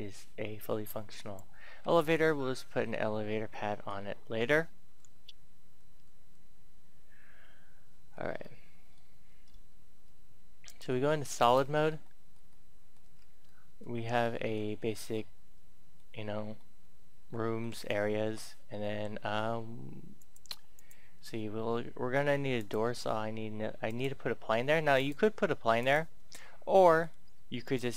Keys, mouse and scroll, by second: 1.8 Tab, 2.2 middle click, 2.8-3.4 scroll up 1, 8.1-8.4 scroll down 1, 8.4-9.7 middle drag, 10.6 click, 12.0 middle click, 12.9-13.4 scroll up 1, 13.4 middle click, 14.8-15.1 scroll down 1, 15.1-17.7 middle drag, 20.1 click, 26.3 scroll up 1, 26.4 scroll down 1, 26.6 middle click, 27.5 right click.